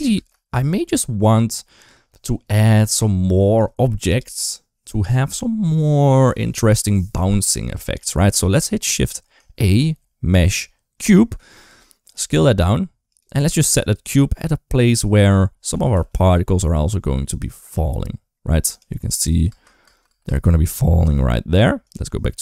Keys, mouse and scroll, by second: 0.6-1.0 middle drag, 7.4 middle click, 9.4 shift+a, 12.0 s, 13.2 g, 14.2 scroll up 1, 14.3 middle click, 15.1 scroll down 1, 15.6 r, 19.3 space, 19.7 space, 19.9 space, 20.1 space, 21.7 click, 22.2 middle click.